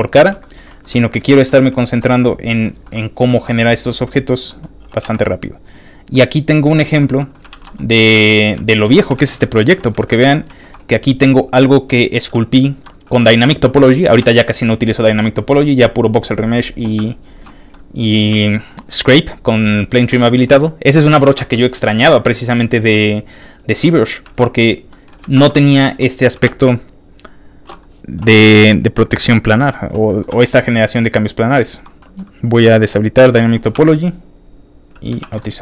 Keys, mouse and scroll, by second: 0.1 shift+middle click, 0.4 shift+middle click, 0.6 shift+middle click, 0.7 shift+scroll down 1, 0.9 shift+middle click, 1.7 shift+middle click, 2.1 shift+middle click, 2.8 shift+middle click, 3.0 shift+middle click, 3.3 shift+middle click, 3.6 click, 4.1 click, 4.5 middle click, 4.8 g, 5.1 x, 5.9 click, 6.1 middle click, 6.8 shift+middle click, 7.1 shift+middle click, 7.4 alt+shift+middle click, 7.6 alt+shift+z, 8.1 alt+z, 9.4 alt+a, 9.4 shift+middle click, 10.0 shift+middle click, 10.2 shift+middle click, 10.2 scroll up 2, 10.3 shift+middle click, 10.6 shift+middle click, 10.9 click, 11.2 middle click, 11.2 scroll down 1, 11.3 middle click, 12.2 g, 13.6 Escape, 13.6 middle click, 14.0 g, 15.4 click, 15.4 y, 17.7 shift+middle click, 18.9 shift+middle click, 20.1 shift+middle click, 20.3 shift+middle click, 21.5 shift+space, 21.6 ctrl+shift+middle click, 22.7-23.9 ctrl+shift+middle drag, 24.2 alt+shift+z, 24.9 shift+middle click, 24.9 alt+z, 25.3 ctrl+Tab, 25.7 ctrl+shift+middle click, 26.4 shift+space, 29.0 ctrl+click, 29.5 middle click, 30.1 middle click, 30.3 f, 30.4 click, 30.7 click, 30.9 click, 32.0 middle click, 33.2 ctrl+d, 34.9 ctrl+click, 35.2 ctrl+r, 35.4 ctrl+middle click.